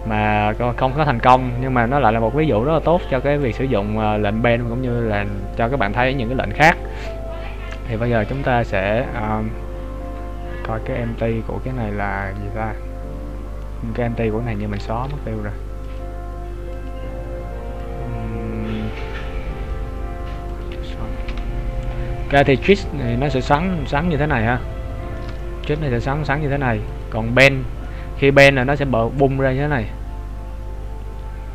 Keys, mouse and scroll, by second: 0.0 ctrl+z, 0.7 middle click, 1.9-2.7 scroll up 2, 3.5 click, 7.8 right click, 12.6-16.1 scroll down 5, 16.1 click, 22.3 middle click, 23.1 shift+middle click, 23.7 middle click, 25.3 shift+middle click, 27.2 click, 27.9 middle click.